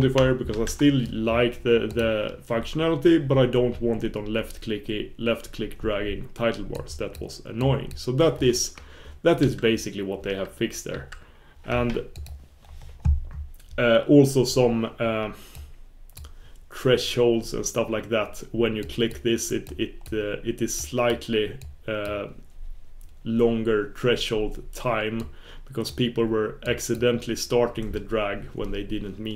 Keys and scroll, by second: 9.4 super+s, 10.9 super+f, 20.1 super+f, 22.1 super+f.